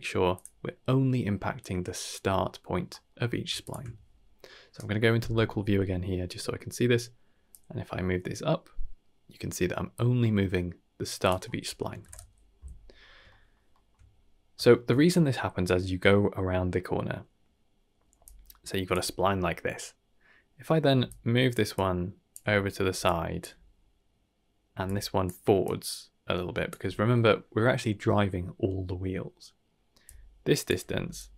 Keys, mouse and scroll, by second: 0.3 click, 1.6-2.1 drag, 2.9 middle click, 3.2 scroll down 1, 3.6 ctrl+shift+click, 4.3 middle click, 5.6-5.9 middle drag, 7.5-11.1 drag, 11.2 click, 13.0 scroll down 2, 13.2 shift+middle click, 13.7 shift+middle click, 14.5 shift+middle click, 18.2-18.9 drag, 18.9 d, 18.9 d, 21.0-21.5 drag, 21.5-23.4 typing, 21.7-22.3 drag, 23.0 click, 24.7 d, 24.8 click, 25.2 d, 25.6 d, 25.6-26.7 drag, 26.7 d, 26.8 d, 30.0-30.6 drag, 30.6 d, 31.1-31.3 drag.